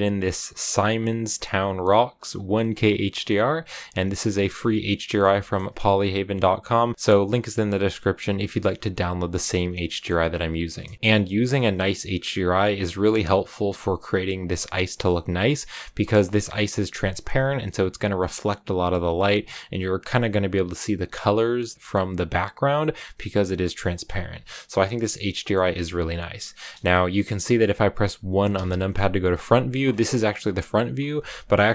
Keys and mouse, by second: 4.8 middle click, 5.2 shift+middle click, 8.6 click, 9.2 click, 9.7 click, 9.7 middle click, 10.7 click, 10.8 middle click, 24.7 middle click, 29.3 KP_1, 29.3 click, 31.2-31.7 drag.